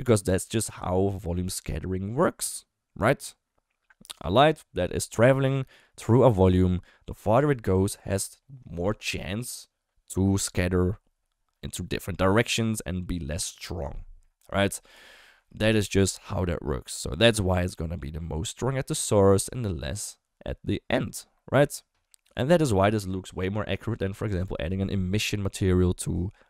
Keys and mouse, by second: 6.0-8.2 d.